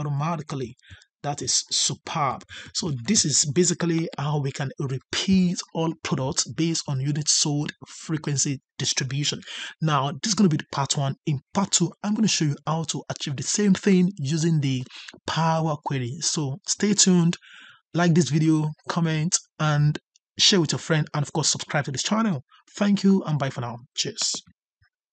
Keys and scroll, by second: 2.4 ctrl+Up.